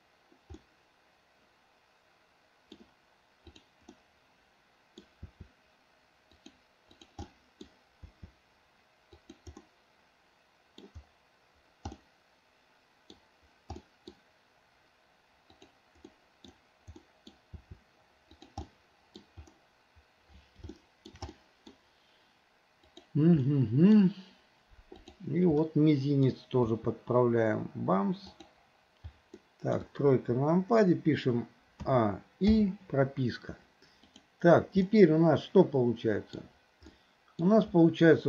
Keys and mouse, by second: 0.7-2.8 middle drag, 4.0-5.1 middle drag, 5.3 r, 7.0 click, 7.3-7.7 middle drag, 8.1 r, 9.7-10.5 middle drag, 10.6 middle click, 12.0-13.2 middle drag, 13.9 middle click, 15.6 click, 16.1-16.6 middle drag, 17.1 middle click, 17.6 r, 18.7-19.3 middle drag, 20.8-21.2 shift+middle drag, 21.3-21.8 middle drag, 22.9 click, 23.5-24.0 middle drag, 25.1 click, 25.7-26.4 middle drag, 26.7 r, 29.5-29.8 middle drag, 29.9 KP_1, 31.9 a, 32.6 i, 34.2 click, 34.9-36.4 middle drag, 37.0-37.5 middle drag.